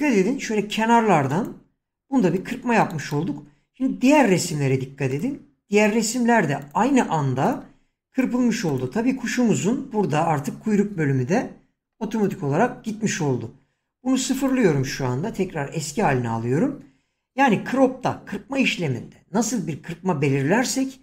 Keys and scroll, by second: 0.5 shift+,, 15.2 5.